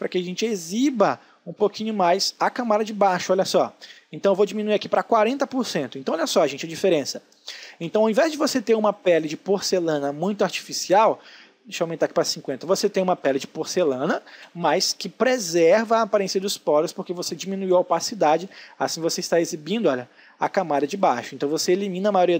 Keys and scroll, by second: 4.9 space, 11.9 space.